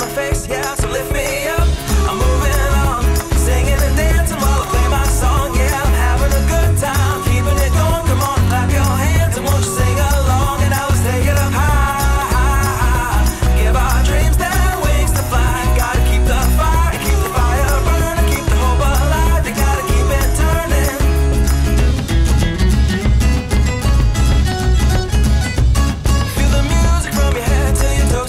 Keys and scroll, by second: 1.4 alt+shift+super+v, 3.2 alt+shift+super+v, 3.5 alt+shift+super+v, 12.5 ctrl+alt+Tab, 14.3 6, 15.7 Return, 16.6 c, 17.6 alt+2, 19.5 alt+e, 20.4 alt+w, 22.1 BackSpace, 22.4 BackSpace, 25.5 alt+2, 25.8 alt+1, 26.8 e.